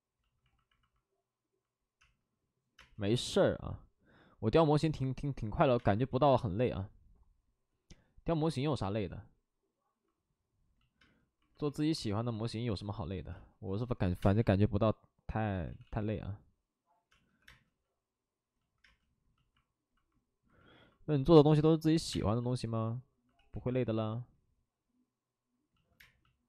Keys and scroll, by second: 3.5 space, 5.7 space, 6.1 ctrl+z, 11.0 space, 13.3 space, 14.0 5, 14.1 space, 15.6 ctrl+z, 17.1 ctrl+z, 17.1 space, 17.3 2, 21.3-22.2 typing, 23.3 ctrl+z, 23.7 2, 25.9 space.